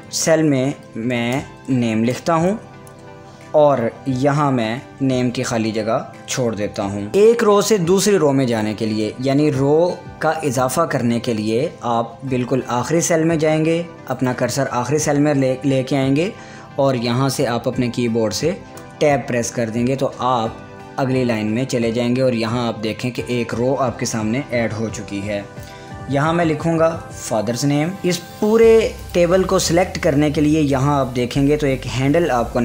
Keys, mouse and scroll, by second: 0.5 shift+n, 1.5-3.0 typing, 4.2 Tab, 6.9 Tab, 14.2 click, 18.8 Tab, 25.9 Tab, 26.0-28.1 typing, 28.0-29.1 drag.